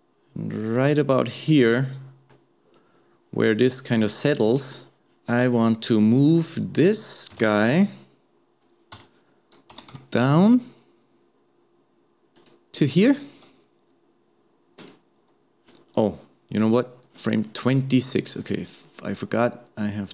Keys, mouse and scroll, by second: 1.5-6.1 middle drag, 6.3-7.3 middle drag, 7.3 KP_7, 9.7 g, 14.8 click, 18.4-20.1 drag.